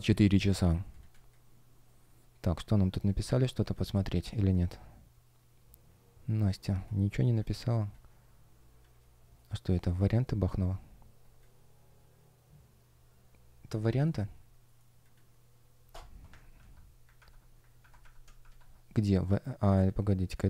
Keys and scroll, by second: 0.3 super+\, 1.0 space, 6.5 space, 9.3 shift+щ, 10.0 shift+п, 10.6 space, 13.9 shift+o, 16.4 shift+super+\, 17.1 super+\, 17.7 super+\, 18.3 shift+super+\.